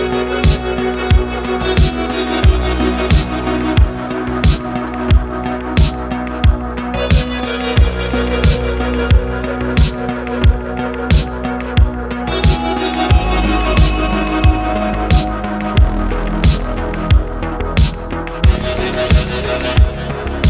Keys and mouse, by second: 2.1 click, 2.4-3.1 middle drag, 3.3-3.8 middle drag, 4.0-4.9 middle drag, 5.4 click, 6.0 g, 7.9 r, 8.7 click, 8.9 middle click, 9.3-9.7 middle drag, 10.0 drag, 10.2 middle click, 10.6 g, 12.7 click, 13.0 r, 14.6 click, 15.0 middle click, 15.6 click, 16.0 middle click, 16.4 g, 17.5 click, 18.1-18.9 middle drag, 19.4 click, 19.7 middle click, 20.2 g.